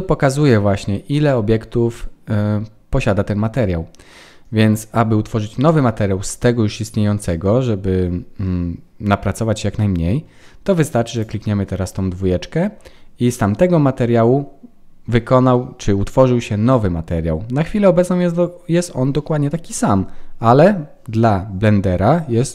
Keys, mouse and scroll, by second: 11.1 click.